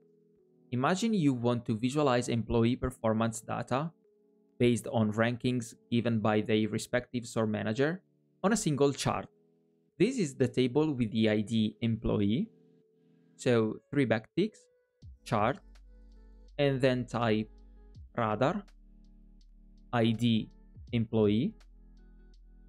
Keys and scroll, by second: 14.0 alt+\.